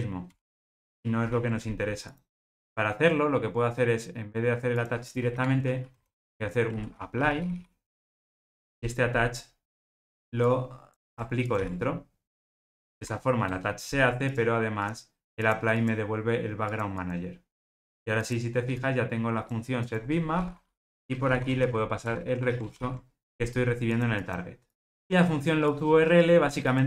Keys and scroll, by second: 7.9 Return, 22.0 Return.